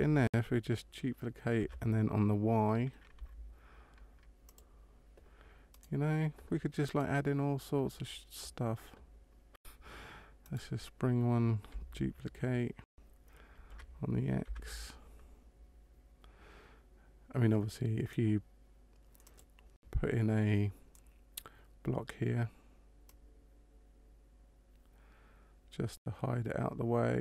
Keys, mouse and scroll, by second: 1.6 shift+d, 5.7 right click, 6.8 right click, 10.5 right click, 13.6 shift+d, 23.0 click.